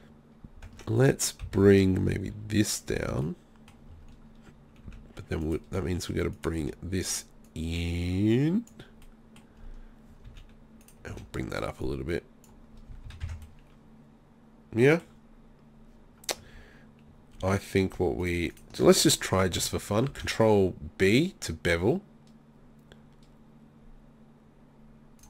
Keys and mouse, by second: 0.7 Tab, 1.0 right click, 1.5 z, 2.9 middle click, 4.9 z, 6.6 z, 9.3 click, 10.3 z, 10.9 right click, 11.1 z, 12.7 click, 12.9 z, 13.1 z, 13.3 Tab, 13.7 click, 16.6 Tab, 20.1 ctrl+b.